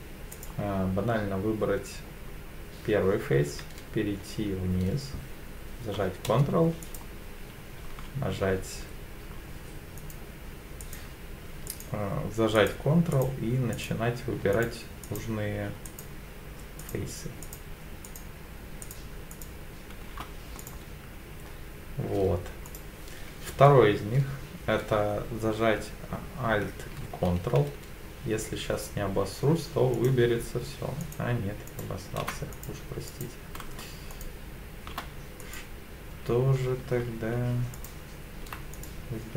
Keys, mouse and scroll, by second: 0.3 click, 6.8 shift+click, 10.0 shift+click, 10.8 shift+click, 11.7 shift+click, 12.5 shift+click, 13.1 shift+click, 13.7 shift+click, 14.5 shift+click, 15.0 shift+click, 15.8 shift+click, 16.8 shift+click, 17.4 shift+click, 18.0 shift+click, 18.8 shift+click, 19.3 shift+click, 20.6 click, 22.7 click, 29.9 ctrl+shift+click, 31.0 ctrl+shift+click, 31.7 ctrl+shift+click, 32.5 click, 33.1 click, 34.1 shift+click, 35.4 click, 37.7 ctrl+alt+click, 38.7 click.